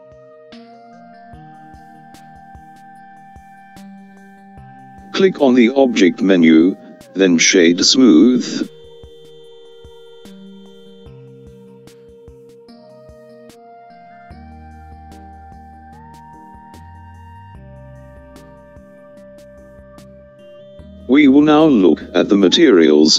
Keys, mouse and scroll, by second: 1.0-4.9 middle drag, 11.0-14.8 drag.